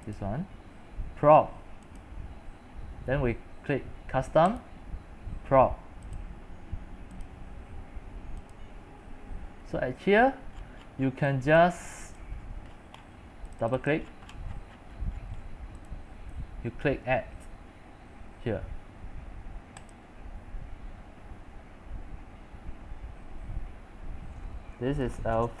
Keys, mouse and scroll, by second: 10.1-10.6 scroll up 9, 10.6-11.1 scroll down 13, 11.1 middle click, 11.1 scroll, 11.3 c, 11.6 click, 12.0 c, 12.4-13.6 middle drag, 12.4-13.3 scroll, 13.6 click, 14.2-15.9 middle drag, 14.4-15.9 scroll, 15.9-25.1 drag, 25.0-25.6 typing.